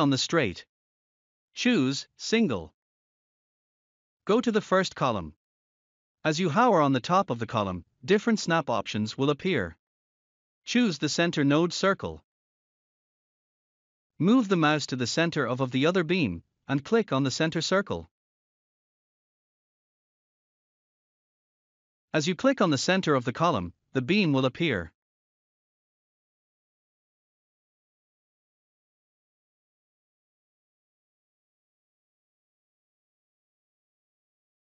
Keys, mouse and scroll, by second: 2.2 click, 4.0-4.9 scroll up 1, 12.8 click, 15.1 scroll down 1, 22.3 scroll up 1, 32.0 click.